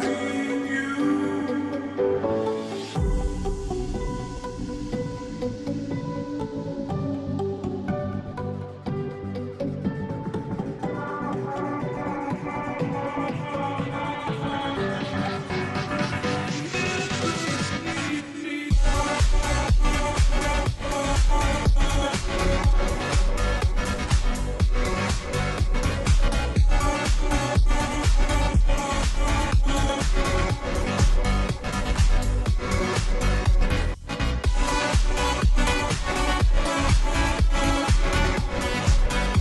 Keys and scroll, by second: 14.2-15.3 space, 20.3-21.8 space, 23.2-28.0 space, 28.8 space, 28.8-29.6 space, 34.1 space, 34.6 space, 34.6-36.4 space, 39.3-39.4 space.